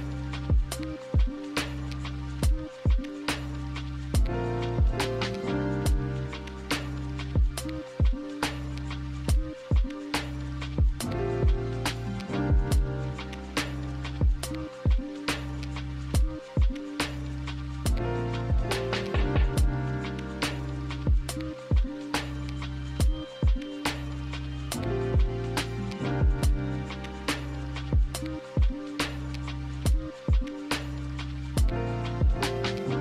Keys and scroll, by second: 17.9 ctrl+z, 18.2 ctrl+z, 18.4 ctrl+z, 25.0 ctrl+z, 28.5 z.